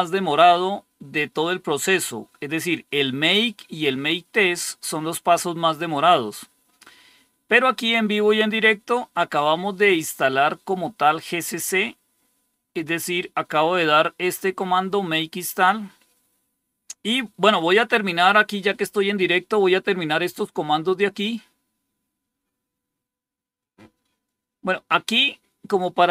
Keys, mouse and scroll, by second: 4.8 scroll down 2, 6.5 scroll down 2, 8.3 scroll down 2, 8.8-9.2 scroll down 3, 9.8 scroll down 2, 11.6 scroll down 2, 12.4-13.2 scroll up 2, 13.2 scroll up 1, 23.5 click.